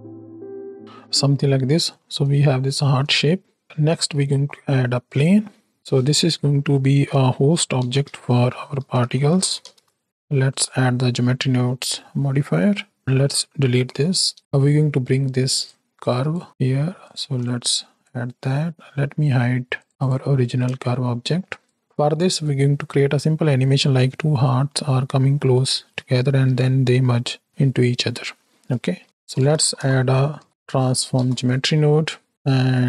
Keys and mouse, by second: 0.2 s, 0.8 Tab, 1.5 shift+click, 2.5 shift+middle click, 3.6 ctrl+space, 3.9 shift+a, 6.3 F2, 10.4 click, 11.2 click, 12.1 click, 13.7 x, 14.1 click, 15.1 click, 15.9 click, 17.0 alt+shift+click, 17.4 click, 19.7 drag, 19.9 click, 20.9 shift+click, 21.6 click, 29.0-29.7 typing, 32.3 click, 32.5 middle click.